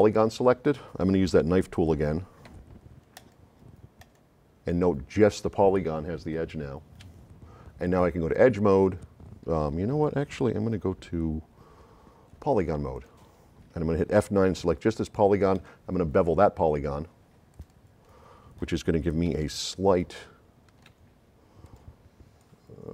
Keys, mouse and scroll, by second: 2.6 [, 3.2 click, 4.0 click, 8.3 click, 12.9 click, 14.2 F9, 14.7 click, 15.6 right click, 17.5 click, 19.3 s, 19.5-20.9 right drag, 21.7 click, 22.8-22.9 drag.